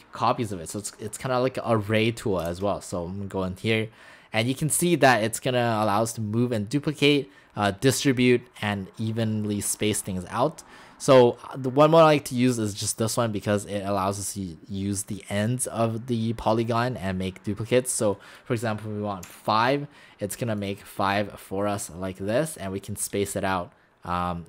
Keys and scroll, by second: 2.5 shift+m, 19.3 5.